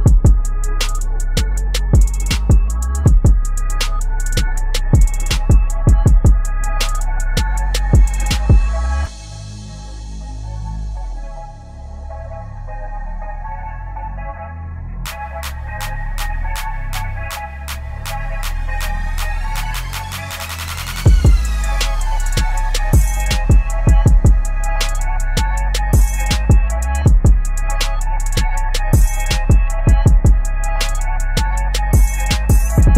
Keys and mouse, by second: 1.2 shift+Left, 1.7 Right, 4.4-7.8 drag, 7.8 Right, 11.5 click, 12.7 ctrl+g, 13.3 click, 14.0-15.6 typing, 16.4 click, 16.7 v, 17.2 shift+Up, 18.0 u, 19.4 click, 20.0 right click, 20.6 click, 22.6 right click, 23.4-30.8 drag, 31.7 alt+click.